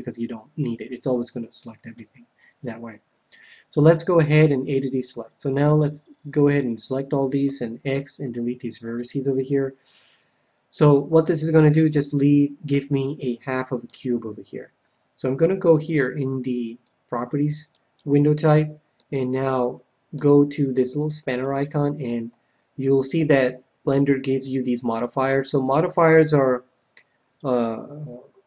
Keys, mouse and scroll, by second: 1.9 KP_1, 4.4 a, 5.5-7.2 ctrl+drag, 7.4 x, 9.2 x, 10.9-14.6 middle drag, 13.8 KP_1, 16.7-18.6 drag, 18.9-20.7 middle drag, 20.9-23.5 drag.